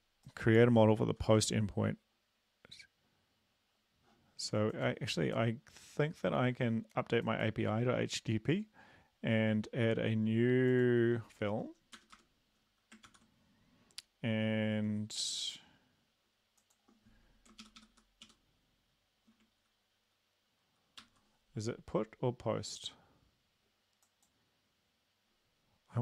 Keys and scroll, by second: 1.0 ctrl+s, 12.0 Return, 12.2 Return, 13.2 ctrl+v, 17.6 shift+Up, 17.8 shift+Up, 18.0 shift+Up, 18.2 shift+Down, 21.0 ctrl+c.